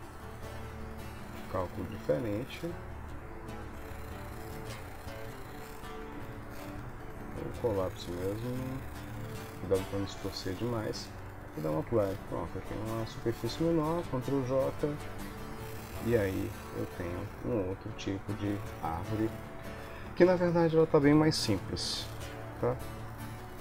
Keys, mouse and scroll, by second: 6.5 click, 7.4 click, 10.2 shift+middle click, 11.5 click, 12.0 Tab, 12.7 Tab, 13.2 shift+click, 14.4 ctrl+j, 15.6 middle click, 18.7 ctrl+s, 19.4 KP_1, 20.4 Tab, 22.1 Tab, 23.1 ctrl+s.